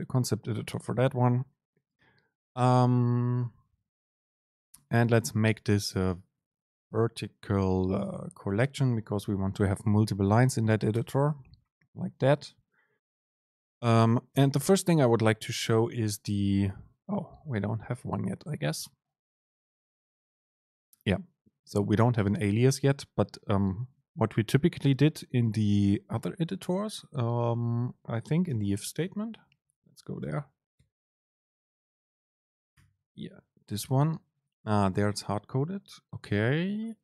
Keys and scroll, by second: 2.7 super+space, 14.5 super+space, 28.6 super+n.